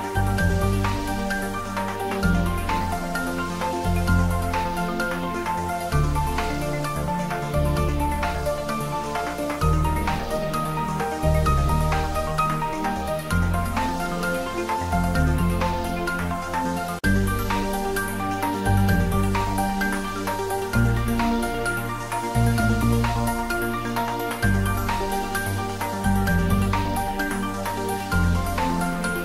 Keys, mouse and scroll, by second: 0.4 scroll down 1, 3.4 click, 3.8-4.2 scroll down 1, 4.2 click, 4.3 scroll down 1, 5.1 click, 5.2-5.6 scroll down 1, 7.3 space, 8.7 click, 9.0 scroll up 1, 10.7 click, 11.4 space, 12.7 space, 13.2 scroll down 1, 14.3 middle click, 15.2 space, 15.9 middle click, 16.7 click, 17.4 space, 17.9 click, 18.1 space, 19.3 ctrl+z, 20.6 click, 20.9 scroll down 1, 23.4 click, 23.7-24.3 scroll down 1, 24.3 click, 24.8 space, 25.7 scroll down 1, 26.0-27.5 middle drag, 27.5 ctrl+z, 28.4 click, 28.6 scroll down 1, 28.9 middle click, 29.1 space.